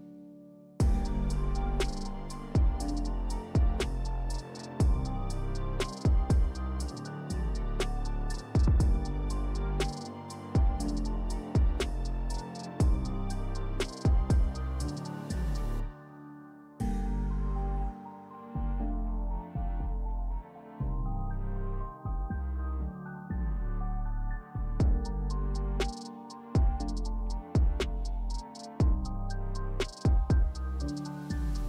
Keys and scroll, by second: 0.2 s, 2.2 s, 4.1 s, 8.0-8.8 typing, 15.0 2, 18.7 3, 20.4 s, 26.2 alt+e, 26.4 s, 28.1 s, 29.3 s.